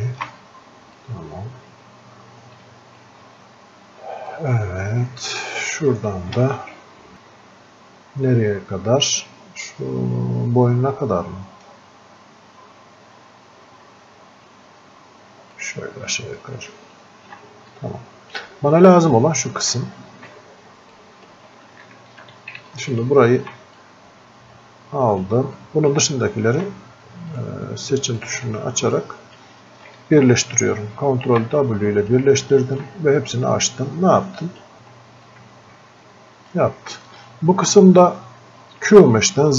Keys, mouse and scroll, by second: 1.0-4.3 drag, 4.3-15.5 drag, 15.5-17.8 ctrl+alt+shift+drag, 17.8-19.8 drag, 19.8 click, 21.0 shift+click, 21.9 alt+click, 23.8-31.3 drag, 31.3 ctrl+w, 31.8 click, 32.5 ctrl+shift+click, 33.3-35.3 drag, 35.3-38.7 drag.